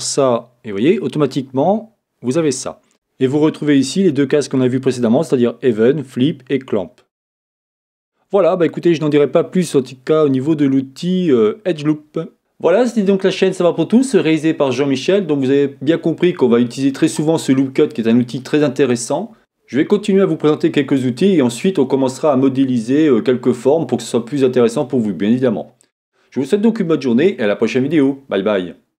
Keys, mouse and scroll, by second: 2.6-3.8 drag, 6.4 click, 8.8-29.0 middle drag.